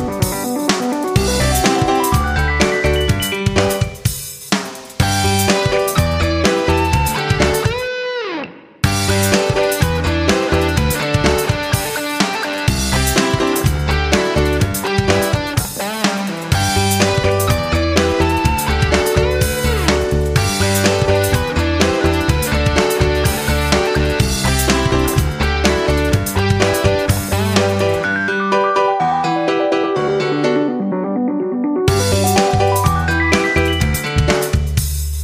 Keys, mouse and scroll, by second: 3.9-5.6 scroll down 1, 5.6 click, 8.7 ctrl+z, 10.3 click, 13.5 scroll down 1, 15.1 click, 15.7 scroll down 1, 16.4 click, 25.8 scroll down 1, 27.5 shift+Down, 30.0 ctrl+z, 30.7 click, 31.5 shift+Down, 33.7 click.